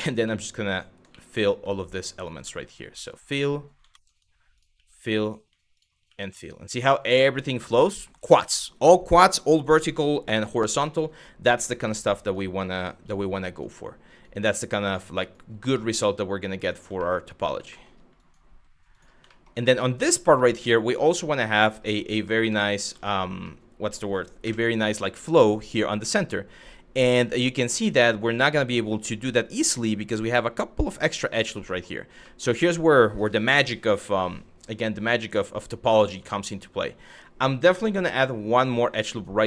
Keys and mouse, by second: 0.7 f, 1.0 click, 1.8 shift+click, 2.0 f, 2.6 click, 3.5 ctrl+z, 4.2 shift+click, 4.3 f, 5.4 shift+click, 10.6 shift+middle click, 11.5 1, 11.8 click, 12.7 g, 13.2 click, 13.7 click, 13.9 g, 14.5 click, 14.9 click, 15.0 g, 16.2 click, 16.7 shift+middle click, 17.3 shift+middle click, 17.9 click, 18.1 f, 18.6 click, 19.0 shift+middle click, 19.9 shift+middle click, 20.7 click, 20.9 f, 22.1 ctrl+right click, 22.6 ctrl+z, 23.2 middle click, 24.1 KP_1, 31.4 shift+middle click, 31.9 shift+middle click, 36.0 shift+middle click, 37.8 click, 38.8 click.